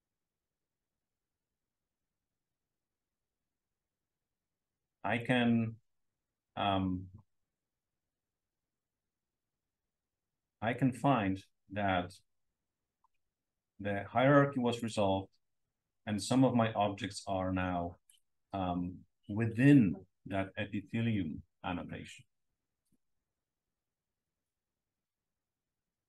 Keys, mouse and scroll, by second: 1.5-2.9 scroll up 1, 3.9 click, 9.5-10.7 drag, 11.7-13.2 drag, 13.3 click, 14.1-18.1 drag.